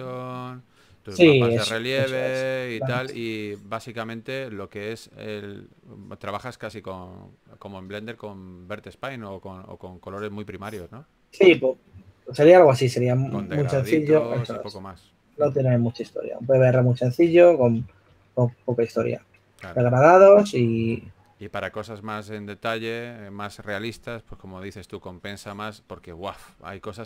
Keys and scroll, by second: 1.3-1.9 typing, 4.9 5, 8.5 s, 11.2-12.9 typing, 15.1-17.1 typing, 18.4-19.1 typing, 20.6 typing, 24.5 4.